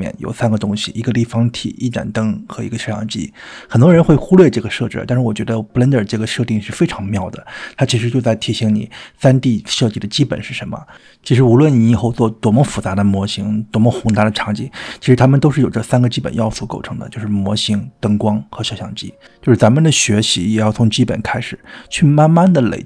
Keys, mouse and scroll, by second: 14.0 click, 15.0 click, 15.6 click, 16.2-16.6 drag, 17.1-17.4 drag.